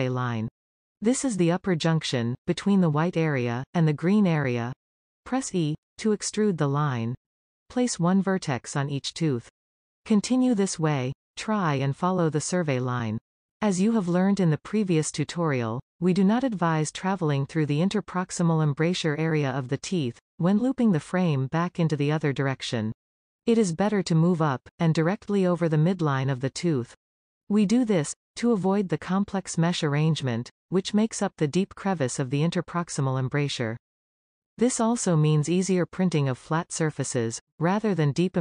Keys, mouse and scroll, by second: 5.7 e, 8.2-10.1 shift+middle drag, 10.1 e, 11.7 e, 13.4 shift+middle click, 14.3 e, 15.0 e, 16.1 shift+middle click, 16.5 e, 16.9 e, 17.2 shift+middle click, 17.5 e, 17.9-19.3 middle drag, 20.8 g, 24.1 e, 24.7 e, 25.1 middle click, 25.8 e, 26.2 e, 26.9-28.4 shift+middle drag, 31.4-35.0 scroll up 1.